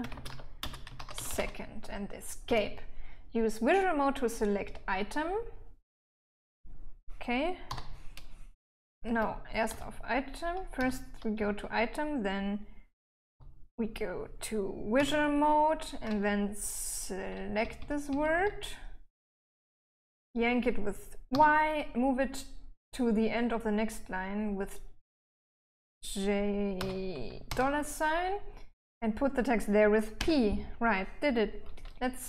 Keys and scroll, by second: 0.0-3.5 typing, 8.0 shift+v, 8.5 j, 9.4 Escape, 10.0 k, 11.1 j, 11.6 k, 13.3-14.0 typing, 15.3 v, 17.6-19.1 typing, 21.6 y, 27.1 j, 27.8 shift+4, 30.2-31.2 typing.